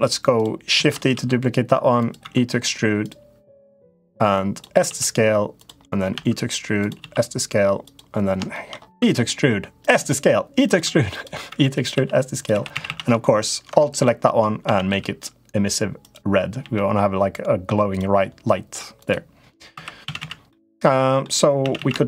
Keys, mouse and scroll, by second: 0.1 shift+click, 0.5 shift+d, 0.9 s, 2.0 e, 3.8 click, 4.6 s, 5.9 e, 6.7 s, 7.6 s, 8.4 shift+middle click, 8.7-12.6 typing, 14.4 a, 14.6 g, 16.3 g, 18.2 middle click, 18.7 click, 19.5 3, 19.8 a, 20.0 a, 20.2 middle click, 21.4 a, 21.5 a, 21.8 shift+click.